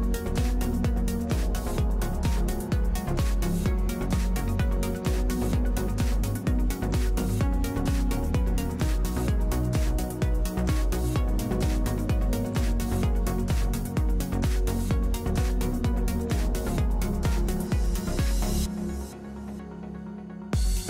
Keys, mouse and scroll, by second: 5.4-6.7 drag, 5.9 f, 15.7-17.1 drag.